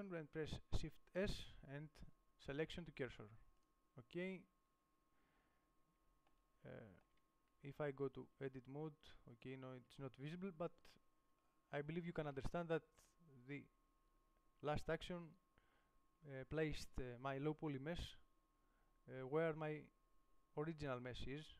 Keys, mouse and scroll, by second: 3.2 click, 3.9 shift+s, 5.9-7.0 middle drag, 7.1 middle click, 8.6 z, 10.2 z, 12.7 g.